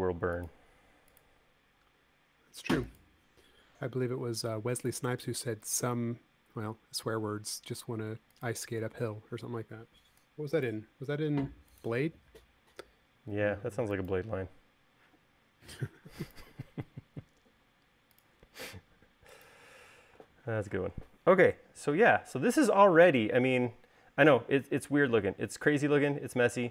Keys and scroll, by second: 9.2 e, 11.6 l, 20.5 space.